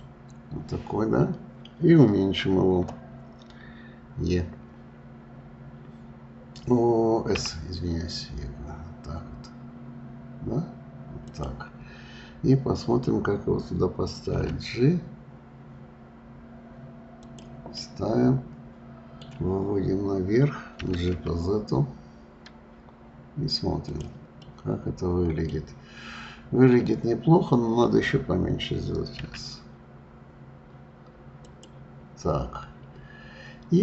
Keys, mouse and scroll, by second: 17.7-20.8 middle drag, 20.8 g, 24.4-25.6 middle drag, 25.6-26.0 scroll down 1, 26.0 scroll up 2, 29.2 s.